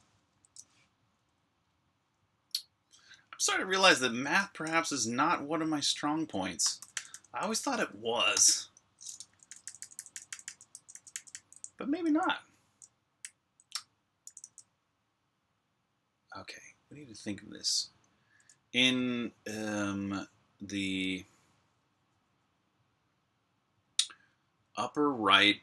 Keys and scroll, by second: 0.2 ⟲, 3.9-14.7 typing.